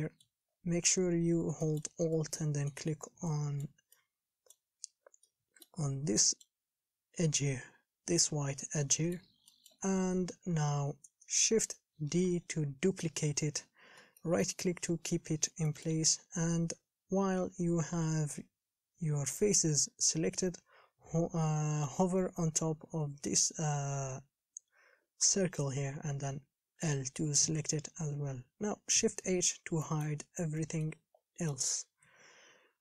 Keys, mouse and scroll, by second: 0.7-1.1 scroll down 4, 1.1 KP_1, 1.3-1.8 scroll up 4, 1.8 shift+middle click, 2.2 scroll up 3, 2.4 middle click, 3.1 scroll down 2, 3.6-4.8 middle drag, 4.8-5.5 shift+scroll down 3, 5.5 middle click, 6.1 scroll up 2, 6.4-8.8 middle drag, 8.8-9.1 scroll down 1, 9.1-10.2 shift+middle drag, 10.2-10.6 scroll down 3, 11.5 KP_1, 12.5 shift+d, 15.9 shift+middle click, 16.5-17.5 scroll up 4, 27.0 l, 29.4 shift+h, 30.1 shift+middle click, 30.6 scroll up 3, 30.8 middle click, 31.3-32.3 scroll down 4, 32.3 KP_1, 32.6 scroll up 4.